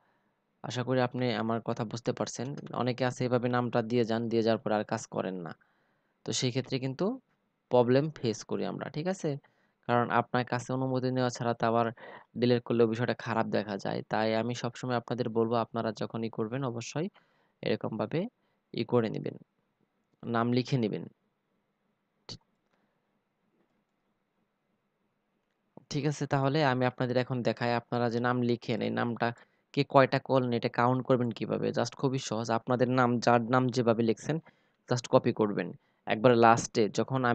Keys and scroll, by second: 0.8 ctrl+v, 33.1 ctrl+c.